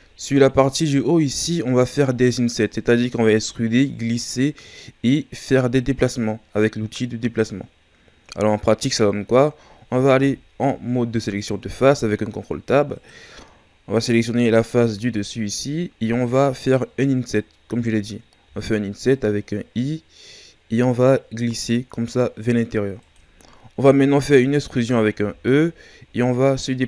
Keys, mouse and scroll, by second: 10.1 ctrl+Tab, 13.9 right click, 15.1-17.2 shift+scroll up 6, 18.4 i, 25.2 e.